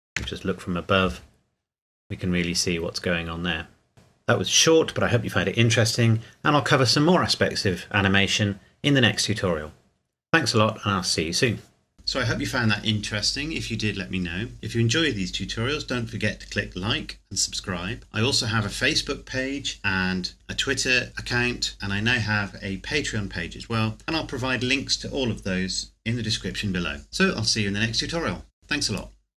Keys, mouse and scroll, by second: 0.2 KP_7, 1.2 scroll down 1, 1.8 scroll up 1.